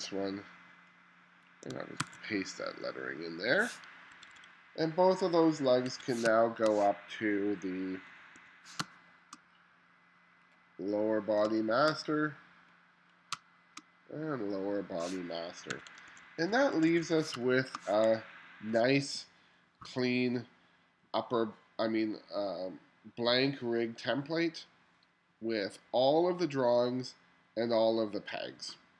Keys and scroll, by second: 2.0 super+v, 4.1 1, 5.9 1, 6.3 space, 8.4 1, 8.8 space, 11.5 space, 13.4 space, 15.8 1, 17.4 space.